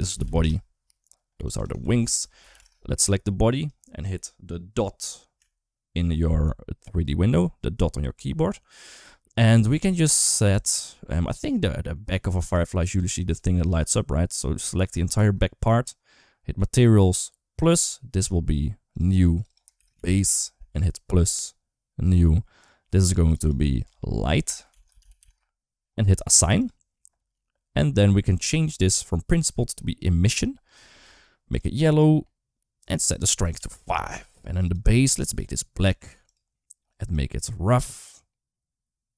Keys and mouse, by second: 1.3 click, 1.4-2.5 shift+drag, 2.8 click, 5.2 KP_Decimal, 7.0 middle click, 9.1 middle click, 9.9 middle click, 10.3 Tab, 10.7 shift+middle click, 11.2 middle click, 12.1 3, 12.3 click, 13.1 click, 13.5 click, 14.0 middle click, 15.2 middle click, 16.6 click, 18.7 click, 19.2 click, 19.4 shift+click, 21.2 click, 22.7 click, 23.1-25.1 drag, 26.2 click, 26.4 click, 28.7-30.6 drag, 33.2 click, 34.5 click, 35.1 click, 38.1-39.1 drag.